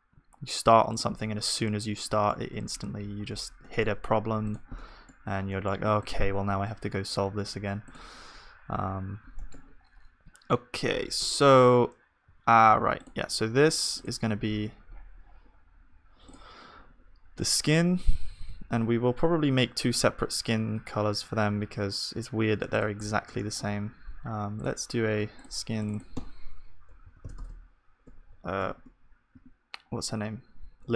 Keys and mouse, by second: 4.5-9.9 drag, 4.5-8.9 middle drag, 4.5 z, 8.9 right click, 9.4-12.2 middle drag, 11.2 z, 12.2 z, 17.5 z, 18.7 z, 21.4 z, 23.1-30.9 drag, 23.1-30.9 middle drag.